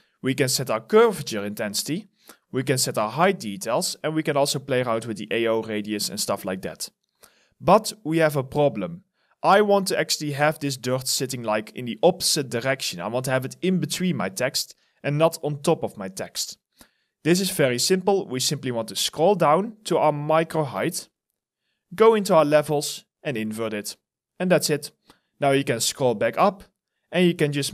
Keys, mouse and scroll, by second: 9.0 alt+click, 18.0-21.4 scroll down 1, 21.9 scroll down 1, 25.5-27.2 scroll up 1.